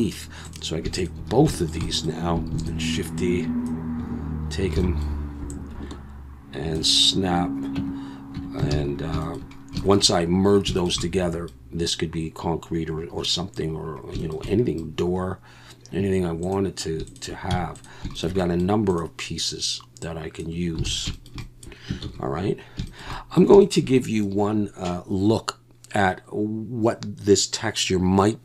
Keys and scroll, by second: 2.5 shift+d, 7.8 Tab, 8.4 Tab, 8.7 alt+a, 17.5 x, 20.9 alt+a, 22.0 ctrl+s.